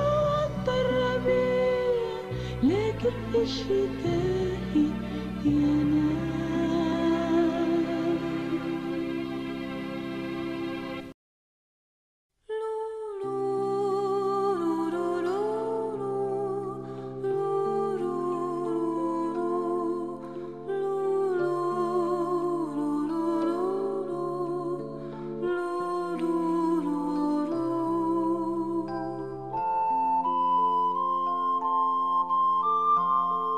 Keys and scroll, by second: 25.7-26.0 typing.